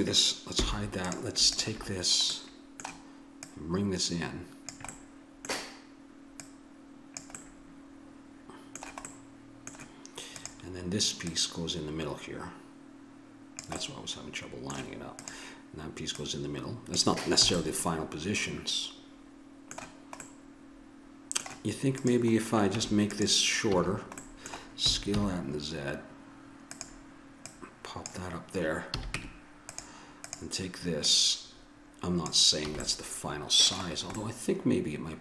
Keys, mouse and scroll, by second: 0.6 h, 2.3 middle click, 2.8 click, 3.7 middle click, 5.1 middle click, 6.4 middle click, 6.7 click, 7.5 middle click, 10.3 middle click, 11.2-13.5 drag, 13.8-15.2 middle drag, 15.2-17.6 drag, 17.5 a, 17.6 middle click, 19.4 middle click, 22.0 right click, 22.7 Tab, 23.7 a, 24.1 click, 24.9 s, 26.2 click, 27.5 click, 28.9 a, 29.2 Tab, 30.2-32.5 right drag, 32.7 a.